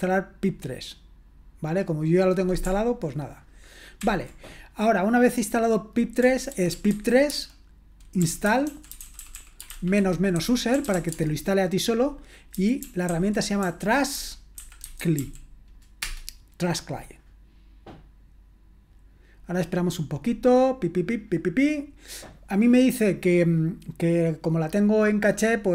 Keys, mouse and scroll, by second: 4.1 ctrl+l, 6.0-15.7 typing, 16.0 Return.